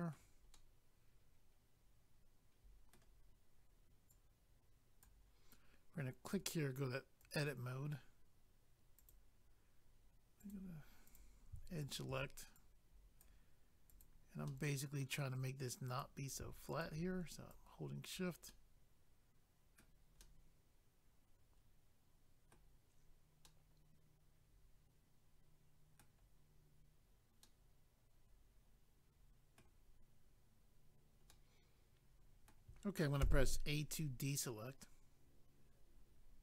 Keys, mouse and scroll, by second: 0.5 middle click, 4.1 click, 6.2 click, 6.3 click, 7.2 click, 7.3 click, 9.0 click, 9.1 click, 10.4 click, 10.5 click, 11.1 click, 11.2 click, 11.8 shift+click, 11.9 shift+click, 12.6 click, 13.9 click, 14.0 click, 14.4 middle click, 15.9 click, 16.0 click, 16.8 shift+click, 17.5 click, 18.5 middle click, 23.4 middle click, 27.4 middle click, 31.3 middle click, 33.2 a.